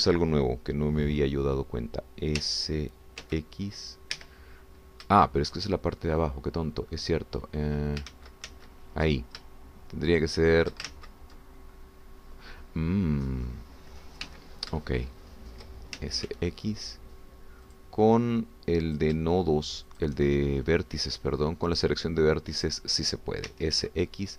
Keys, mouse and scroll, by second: 3.4 s, 4.3 x, 5.2 Escape, 5.6-5.9 scroll up 1, 6.2-9.0 shift+drag, 9.1 ctrl+z, 11.2 shift+click, 11.9 ctrl+shift+z, 13.5-15.2 drag, 15.2 1, 15.8 shift+middle click, 17.0 shift+s, 17.3 shift+x, 18.7 click, 20.0 shift+click, 21.0 shift+click, 21.3 shift+middle click, 22.8 shift+click, 23.7 shift+click.